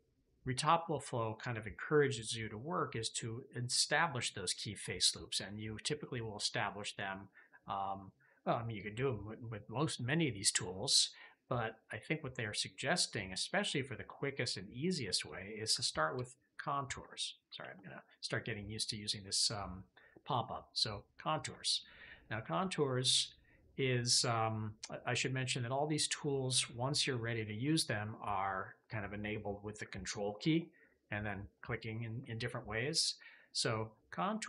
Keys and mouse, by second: 15.1 click, 17.5 alt+q, 22.1-23.8 middle drag, 30.8-32.9 middle drag.